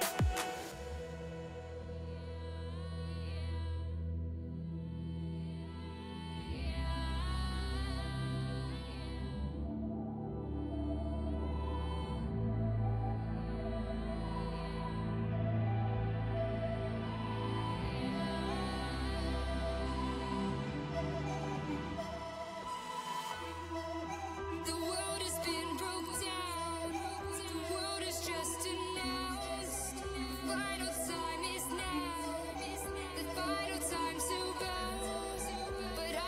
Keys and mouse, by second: 6.7 ctrl+z, 10.4-36.0 drag, 31.3-36.0 middle drag.